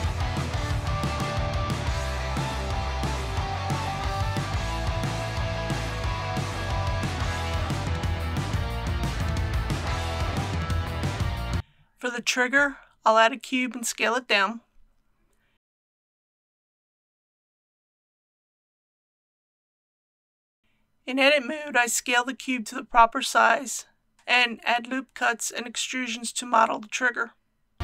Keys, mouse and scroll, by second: 0.0-0.7 typing, 0.2 click, 1.6 click, 2.0-3.8 typing, 3.6 click, 4.3 ctrl+r, 5.3-5.9 scroll up 2, 5.4 click, 5.6 ctrl+r, 5.9 click, 6.1 ctrl+r, 6.3 scroll up 1, 6.4 click, 6.7 ctrl+r, 6.8 scroll up 1, 7.0 click, 7.3 alt+shift+click, 8.4 alt+shift+s, 8.5 alt+shift+y, 9.0 click, 9.3 3, 9.6 alt+click, 10.2 alt+shift+x, 10.3 click, 10.7 alt+h, 11.0 scroll down 1, 11.2 middle click, 11.6 alt+a, 14.4 click, 15.3 click, 18.0 click, 18.4-18.9 typing, 20.6 KP_1, 20.7 Tab, 22.3 click, 26.1 ctrl+r, 26.7 click.